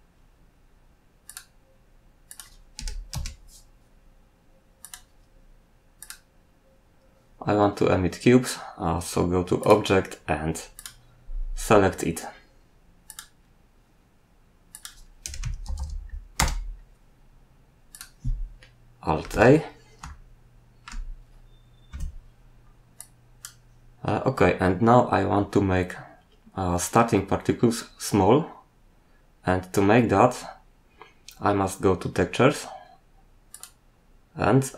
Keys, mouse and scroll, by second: 1.2 click, 2.2 click, 2.7 typing, 3.1 Return, 4.8 click, 6.0 click, 9.6 click, 10.7 click, 13.0 click, 14.7 click, 15.0-16.2 typing, 16.3 Return, 18.3-19.2 scroll down 2, 19.3 alt+a, 20.4 shift+middle click, 21.9 Escape, 23.0 click, 33.5 click.